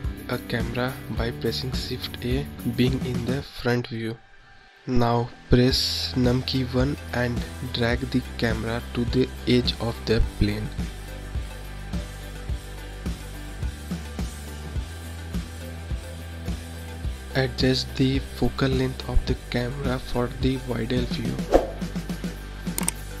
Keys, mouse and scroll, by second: 2.5 KP_1, 6.2 ctrl+click, 13.5 KP_0, 16.2 click, 18.1-21.2 drag, 22.1-22.6 scroll up 3, 22.6-23.2 scroll down 3.